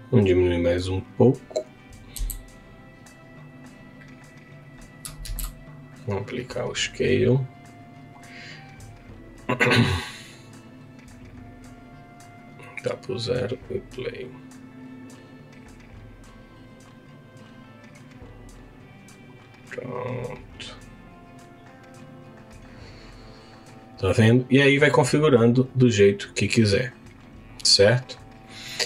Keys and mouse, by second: 0.8 click, 2.1 s, 4.6 click, 5.2 ctrl+a, 11.4-13.5 drag, 24.4 click, 25.6 click, 27.5-28.8 drag.